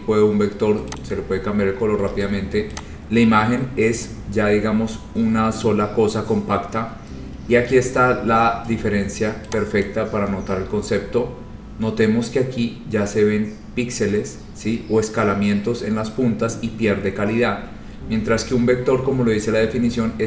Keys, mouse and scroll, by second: 0.2 scroll, 1.1 click, 2.2 ctrl+z, 2.9 click, 7.5 scroll, 8.0-8.4 scroll, 9.0 scroll, 9.6-9.9 scroll up 5, 9.9 click, 10.6-12.5 scroll, 14.1-14.6 scroll, 15.8-16.3 scroll, 17.4 scroll up 9, 17.7 scroll, 18.0 scroll down 11, 18.1 scroll, 19.0 scroll.